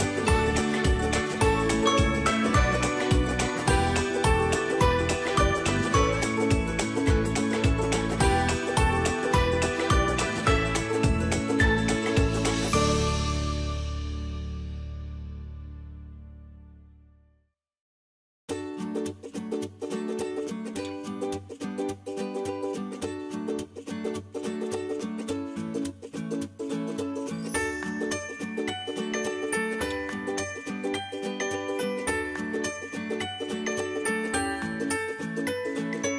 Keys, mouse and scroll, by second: 2.9-7.0 drag, 7.0 space, 7.3-12.5 alt+drag, 15.7 ctrl+j, 16.3-18.2 drag, 21.3 ctrl+m, 22.6-25.8 drag, 25.8 Return, 26.7 click, 27.0 space, 27.3 alt+click, 31.2 ctrl+s, 33.6 click.